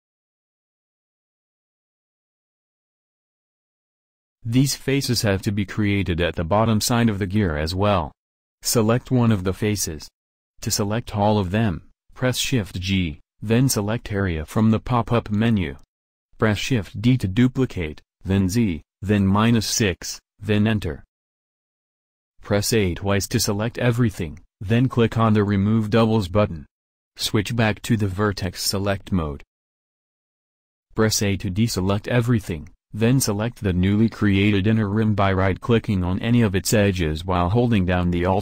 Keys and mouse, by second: 2.4 shift+d, 5.0 a, 12.7 shift+g, 16.4 shift+d, 22.5 a, 22.9 a, 25.0-26.9 drag, 28.3-31.0 drag, 30.0 middle click, 31.0 a, 33.1-34.3 drag.